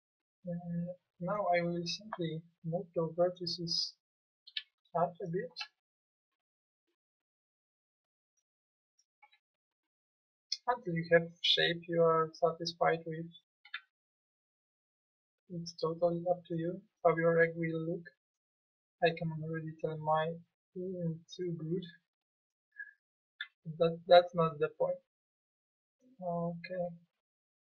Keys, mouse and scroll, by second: 5.5 b, 9.2 b, 9.6-10.6 drag, 13.7 b, 17.3 b, 19.2-20.9 drag, 20.9 middle click, 22.5 click, 23.3 b, 23.7 click, 25.2 click, 26.8 b.